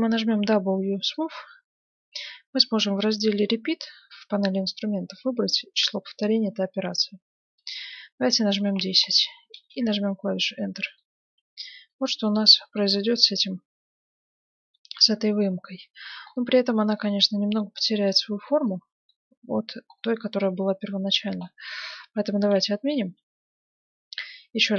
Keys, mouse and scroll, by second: 0.3 w, 6.9-8.5 drag, 10.5-15.2 middle drag, 11.1 Tab, 16.2-23.5 middle drag, 22.5 ctrl+z, 22.9 Tab, 24.3 middle click.